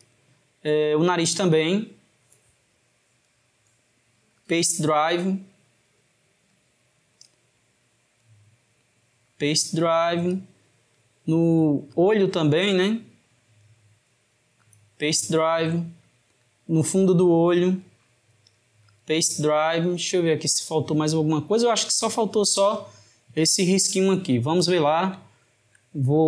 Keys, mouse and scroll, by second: 0.9 click, 1.6 click, 3.3-5.9 right drag, 5.9 click, 6.6 click, 8.3-11.2 right drag, 11.9 click, 13.7-16.1 right drag, 16.1 click, 17.8-20.9 right drag, 22.0-25.1 shift+middle drag, 25.3-26.2 shift+middle drag.